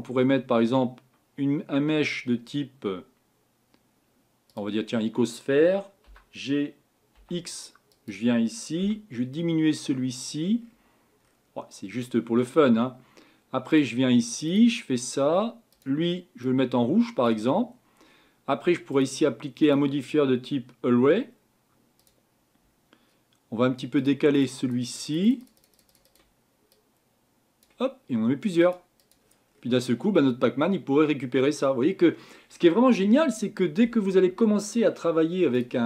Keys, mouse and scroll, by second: 6.1 g, 8.9 s, 10.7-11.1 scroll up 7, 11.2-11.6 scroll down 6, 14.7-16.4 drag, 22.1-29.5 drag, 29.5-29.9 scroll down 5, 30.1 scroll up 4, 35.6 click.